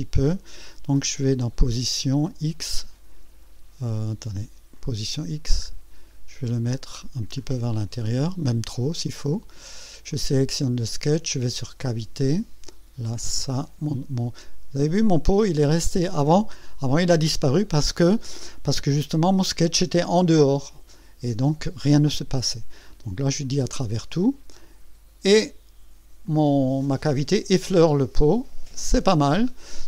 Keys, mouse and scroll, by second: 1.3 click, 2.2 click, 2.8-3.1 scroll down 1, 3.6 scroll up 1, 4.7 click, 5.1-5.4 scroll down 1, 5.5-5.9 scroll up 1, 6.1 scroll up 1, 6.8 scroll up 1, 7.3 scroll up 1, 7.9-8.2 scroll up 1, 9.0 click, 10.1 click, 11.8 click, 13.1-14.1 drag, 22.9 click, 23.4 click, 24.6-25.5 drag, 26.2-27.1 drag, 27.8-29.0 drag.